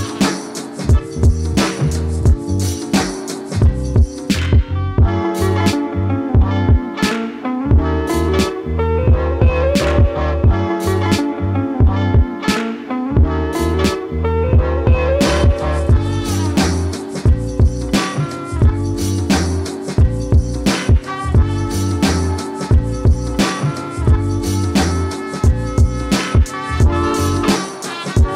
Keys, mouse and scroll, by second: 0.2 click, 3.1 click, 5.4 click, 12.6 click, 18.7-25.1 drag.